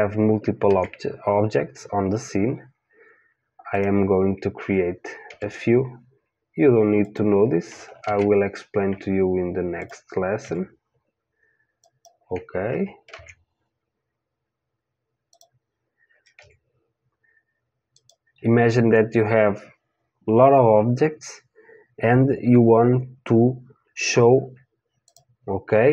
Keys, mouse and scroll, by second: 0.6 shift+a, 5.3 g, 8.0 shift+a, 10.4 g, 13.1 shift+a, 16.3 g, 25.1-25.9 drag.